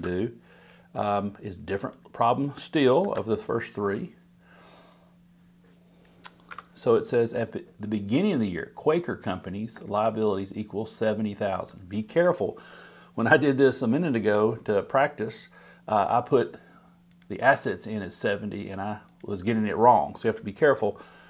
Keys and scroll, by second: 3.0 super+v.